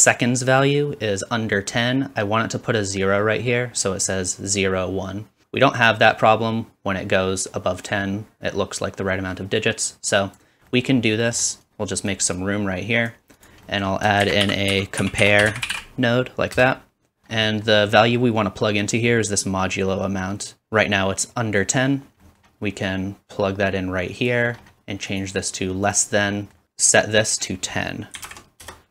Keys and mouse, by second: 13.4 middle click, 14.4-28.9 drag, 14.4 shift+a, 17.0-17.7 typing.